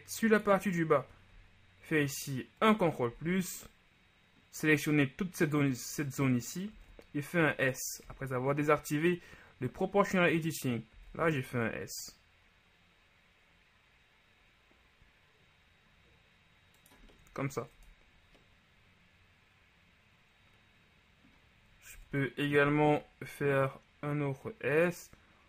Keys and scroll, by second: 1.9 ctrl+KP_Add, 3.2 ctrl+z, 6.9 s, 8.1 0, 11.1 s, 17.8 Tab, 22.1 Tab, 22.7 s.